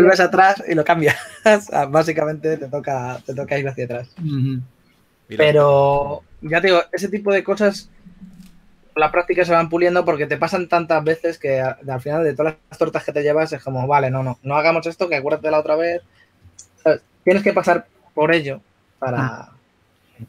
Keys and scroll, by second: 0.5-1.2 typing, 5.9 shift+f, 11.7 shift+f, 16.8 w, 19.1-20.2 typing.